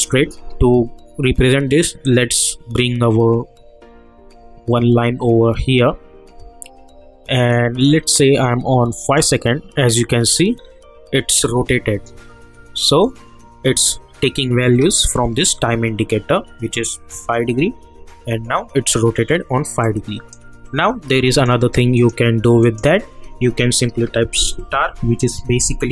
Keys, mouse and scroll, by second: 2.0-9.0 drag, 10.5-10.9 scroll up 1, 19.8-21.3 drag, 25.3 shift+8.